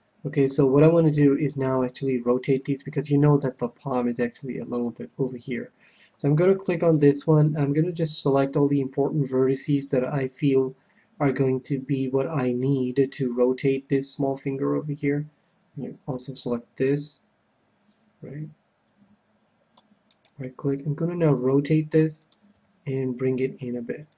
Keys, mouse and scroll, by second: 1.4-2.8 drag, 1.8-4.4 middle drag, 6.8-8.6 drag, 7.3 c, 20.1-22.0 right drag, 21.2 r, 22.3-24.1 drag, 22.5 g.